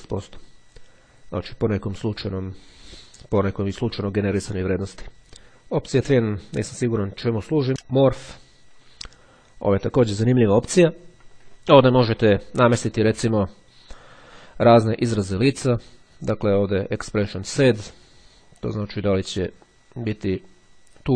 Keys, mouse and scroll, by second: 7.7 click, 18.4-21.1 drag.